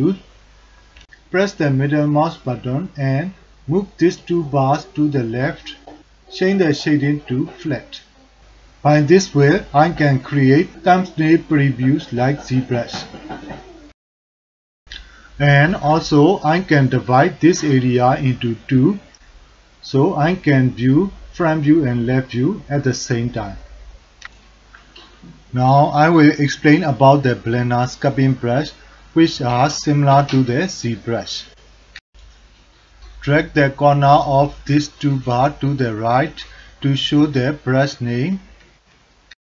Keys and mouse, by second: 1.0-3.1 middle drag, 5.0 middle click, 5.4 middle click, 6.7-8.7 drag, 12.6-13.9 drag, 13.9 3, 14.2 f, 14.5 drag, 14.9 click, 16.2 click, 16.4 click, 16.5 click, 16.7 click, 17.1 alt+shift+click, 17.4 alt+shift+click, 17.7 click, 18.0 click, 18.3 click, 19.0 click, 19.6 click, 20.1 click, 21.0 click, 21.7 middle click, 22.4 ctrl+alt+middle click, 22.6 alt+click, 23.1 click, 23.4 alt+shift+click, 23.8 alt+middle click, 24.1 alt+shift+middle click, 24.4 ctrl+middle click, 24.7 alt+middle click, 24.8 ctrl+alt+middle drag, 25.0 f, 25.3 drag, 25.7 click, 25.9 drag, 26.1 drag, 26.4 f, 26.4 click, 26.8 ctrl+drag, 27.1 click, 27.3 click, 27.8 click, 27.9 alt+middle click, 28.7 click, 29.0 click, 29.0 f, 29.2 ctrl+alt+click, 29.6 alt+shift+middle click, 30.3 ctrl+alt+middle drag, 36.5 click, 37.0-39.4 drag.